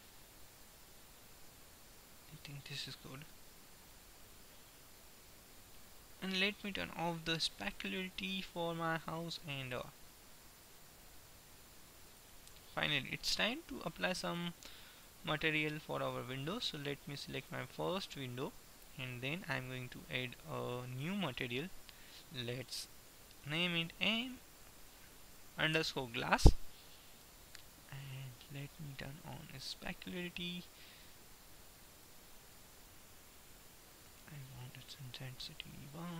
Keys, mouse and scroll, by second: 2.9-4.9 middle drag, 6.3-7.8 right drag, 7.8-8.9 middle drag, 8.9-9.9 drag, 12.8 middle click, 16.8-19.3 middle drag, 21.3-23.8 drag, 25.3 s, 28.3-29.4 middle drag, 29.4-31.3 drag, 31.8-33.4 drag, 33.4-35.1 middle drag, 35.1-36.1 drag.